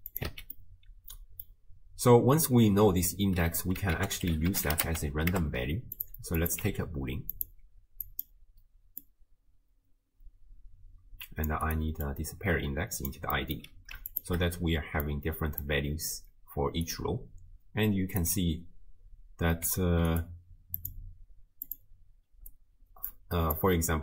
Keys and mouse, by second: 0.3 x, 0.6 click, 4.0 ctrl+a, 6.4 click, 7.3-8.3 drag, 9.0-11.8 drag, 12.1-13.1 drag, 13.3 middle click, 14.1 ctrl+shift+click, 15.0 click, 16.6 d, 16.9-18.3 drag, 18.3 d, 19.7 z, 20.8-22.0 drag, 22.5 d, 23.0 d, 23.1-24.0 d.